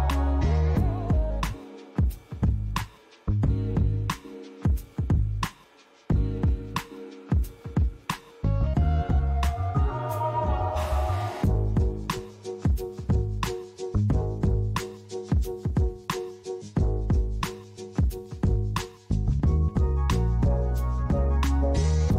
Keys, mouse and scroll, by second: 0.7 m.